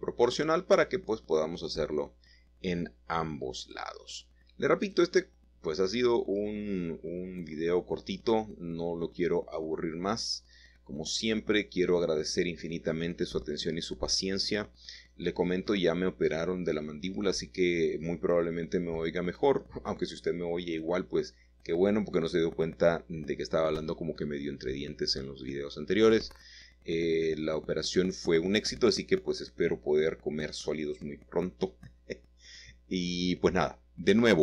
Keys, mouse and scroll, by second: 0.0-0.5 typing, 2.2 click, 3.0 shift+middle click, 3.6 shift+middle click, 4.1 click, 5.2 shift+click, 9.7 click, 10.3 click, 11.4-11.7 typing, 13.0 click, 13.5 click, 13.5 middle click, 15.8-16.7 scroll down 2, 16.1 middle click, 16.3 middle click, 17.5 shift+middle click, 18.4 shift+middle click, 19.1-20.3 scroll up 1, 19.7 shift+middle click, 20.3 shift+middle click, 22.8 s, 23.3 x, 24.8 click, 25.8-26.7 typing, 27.3 click, 28.2 typing, 29.2-29.6 scroll down 1, 29.6-31.0 shift+middle drag, 31.0 typing, 32.1 typing, 33.2 typing.